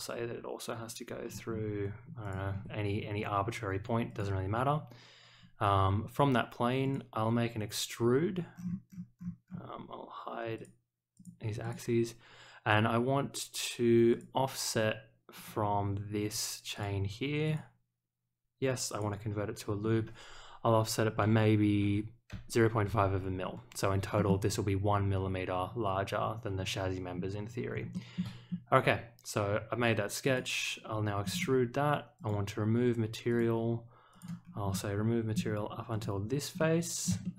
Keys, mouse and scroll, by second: 2.2 ctrl+click, 4.0 click, 6.8 click, 8.5-9.5 scroll down 3, 10.5 click, 11.1 click, 11.6 click, 14.1 click, 15.3 click, 16.7 click, 17.4 click, 18.9 click, 24.1 middle click, 27.1 scroll up 1, 27.9 shift+middle click, 28.4 scroll up 1, 30.2 click, 31.2 middle click, 32.1 click, 33.3 click, 34.1 click, 34.7 middle click, 35.9 click, 36.5-37.0 middle drag, 37.2 shift+middle click.